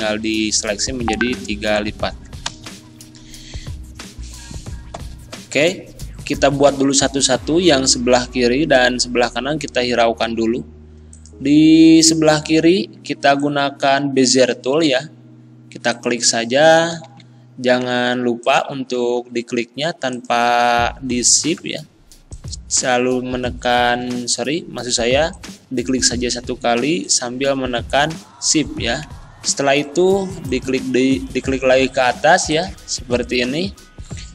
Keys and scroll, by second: 2.5 End, 17.0 ctrl+z, 17.8 ctrl+z, 18.8 ctrl+z, 24.1 ctrl+z.